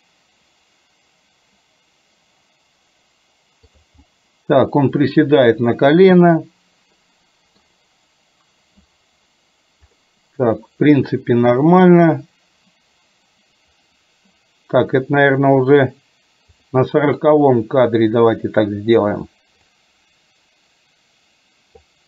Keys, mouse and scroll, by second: 4.2-7.7 middle drag, 16.5 click, 19.8-21.9 drag.